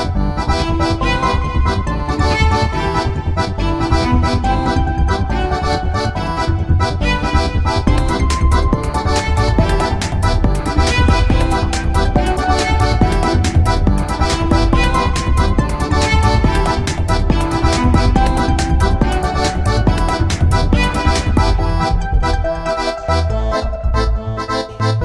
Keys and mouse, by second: 1.9 r, 4.0 z, 5.4 alt+r, 6.2 click, 7.0 r, 8.6 z, 9.0 click, 9.9 right click, 10.1-11.9 drag, 11.9 middle click, 12.8-14.7 drag, 14.4 a, 14.8-16.1 middle drag, 16.1-17.5 drag, 17.5 right click, 17.8 shift+s, 22.2-24.1 drag.